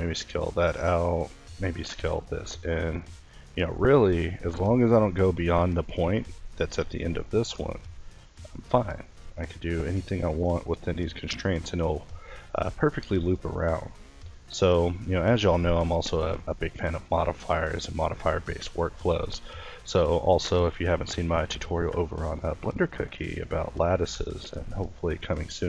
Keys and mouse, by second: 1.8 shift+s, 4.8 a, 11.1 ctrl+t, 12.5 ctrl+i, 14.1 ctrl+t, 18.4 x, 19.5 Tab, 20.4 Tab, 21.4 ctrl+r, 22.0-23.3 middle drag, 23.3 ctrl+r, 24.9 click.